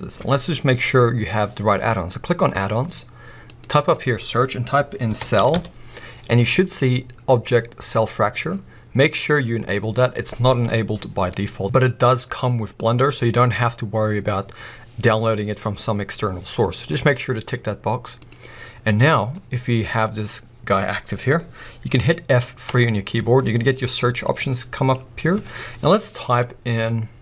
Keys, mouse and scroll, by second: 18.8-27.2 middle drag, 19.4-20.0 scroll up 2, 20.0-22.1 scroll down 2, 22.7 F3.